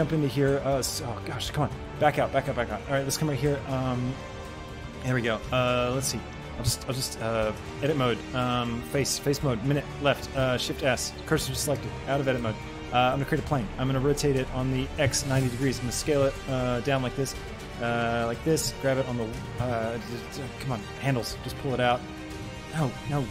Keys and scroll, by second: 6.6 shift+a, 10.7 shift+s, 11.8 Tab, 12.5 shift+a, 14.0 r, 15.1 KP_9, 15.4 Return, 15.8 s, 16.2 z, 18.7 g, 19.1 y, 19.5 Escape, 22.4 Escape, 23.1 ctrl+z.